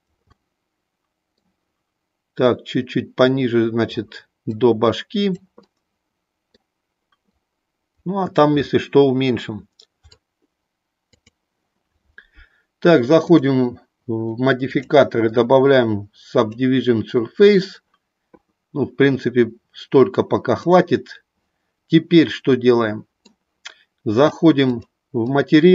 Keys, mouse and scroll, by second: 0.3-1.4 middle drag, 2.5-3.8 drag, 4.6 click, 5.6 middle click, 7.3 click, 10.2-11.3 drag, 14.7-16.4 drag, 20.4 click, 22.5 middle click, 24.7 click, 25.2 click.